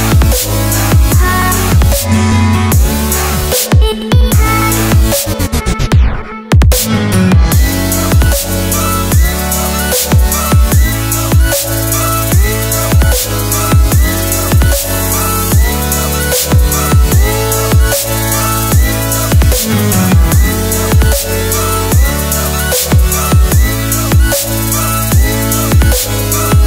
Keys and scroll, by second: 2.3 Right, 8.9 Escape, 9.2 Return, 11.3 z, 15.0 z, 18.8 super+[, 20.1 super+], 21.2 super+[, 23.0 super+].